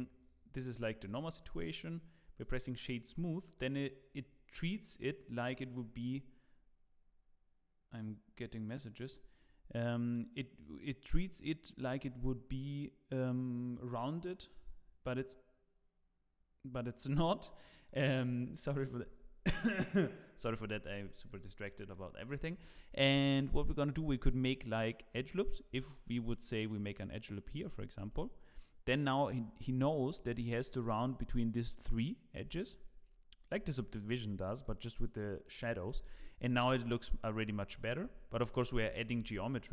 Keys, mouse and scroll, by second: 1.0 middle click, 1.8 right click, 3.5 middle click, 17.5 middle click, 18.2 scroll up 2, 18.6 middle click, 21.0 shift+middle click, 21.6 scroll down 2, 21.9 middle click, 22.4 shift+middle click, 23.9 Tab, 24.5 middle click, 25.8 ctrl+r, 27.9 Tab, 28.6 middle click, 29.4-29.8 scroll up 6, 29.8 shift+middle click, 30.2 Tab, 30.4-30.9 scroll up 1, 30.9-31.7 scroll up 1, 32.4 Tab, 32.6 scroll down 4, 33.3-33.7 scroll down 5, 34.6 middle click, 38.0 ctrl+z, 38.3 ctrl+z.